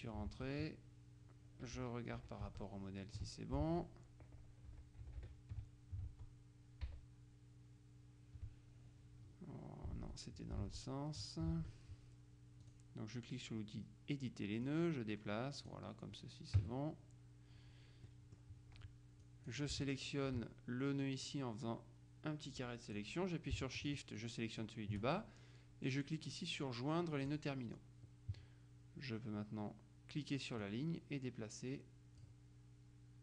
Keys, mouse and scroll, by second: 0.5 alt+Tab, 1.9 Left, 2.3 Right, 2.5 Tab, 3.7 alt+Tab, 4.8 Left, 5.2 Right, 6.3 Tab, 7.0 Left, 10.1 alt+Tab, 11.7 alt+Tab, 12.7 click, 14.8-16.3 drag, 16.7 KP_Subtract, 18.2 middle click, 19.3 click, 21.3-23.5 drag, 24.0-25.2 shift+drag, 27.4 click, 30.7-32.8 drag.